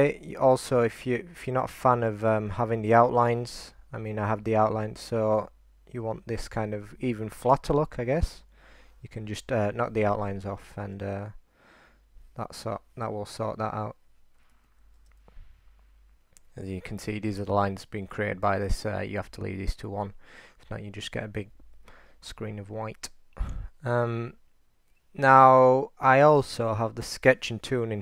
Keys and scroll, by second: 3.4 super+r, 11.0 super+3, 12.0 super+3, 12.5 super+3, 13.1 super+3, 13.6 super+3, 14.2 super+3, 15.0 3, 21.9-23.7 3, 25.8 typing.